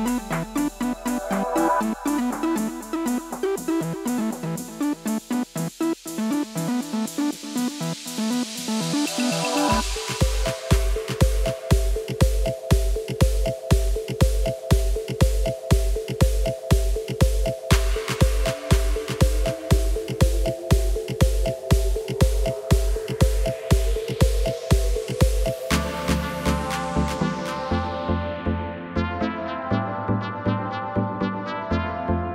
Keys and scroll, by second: 2.9 d, 5.3 a, 7.1 a, 16.6-17.3 typing, 20.5 d.